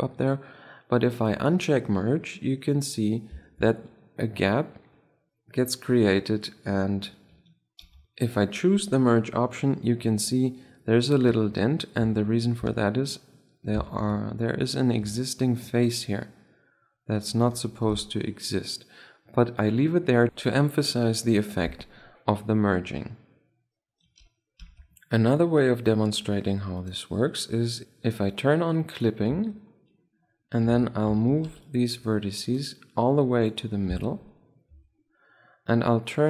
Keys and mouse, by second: 1.1-2.5 middle drag, 2.5 click, 3.1-6.7 middle drag, 7.6 ctrl+z, 8.1 click, 9.7-14.7 middle drag, 11.9 z, 12.5 Tab, 13.8 ctrl+Tab, 14.9 z, 15.0 middle click, 15.3 z, 15.7 click, 17.5 z, 17.8 Tab, 18.0-19.8 middle drag, 27.1 click, 27.8 ctrl+z, 29.6 Tab, 30.3-30.7 middle drag, 31.1 z, 31.4 a, 31.8 b, 32.9-34.2 drag, 34.2 Tab, 34.6 middle drag, 35.1 z.